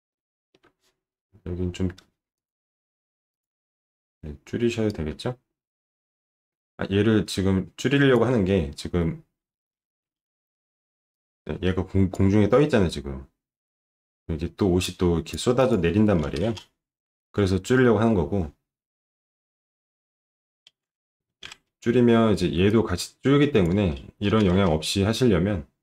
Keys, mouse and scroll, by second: 0.1 alt+middle click, 2.3 click, 3.3 click, 3.6-4.0 scroll up 1, 4.9-8.1 drag, 9.5 alt+middle click, 10.5 ctrl+shift+9, 17.6 alt+middle click, 20.8 ctrl+shift+9.